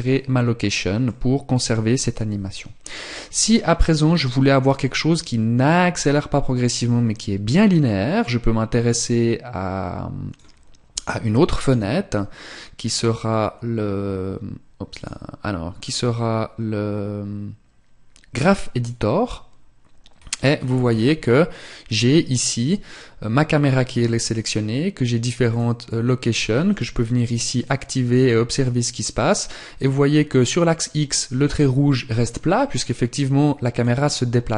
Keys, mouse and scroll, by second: 10.9 click, 14.3 click.